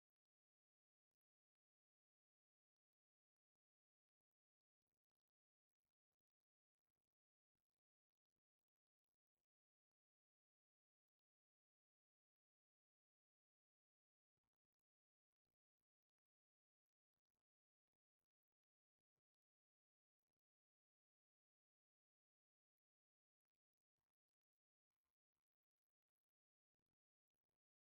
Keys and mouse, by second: 1.3-2.5 middle drag, 2.5 KP_7, 5.0 middle click, 14.0 shift+a, 20.0 g, 25.5 s.